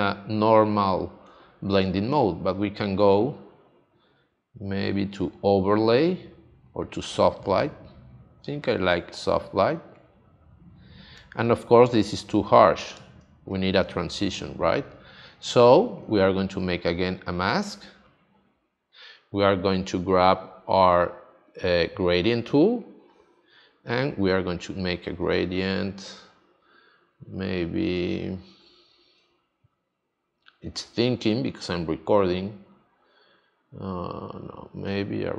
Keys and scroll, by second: 13.2 space, 27.9 super+z.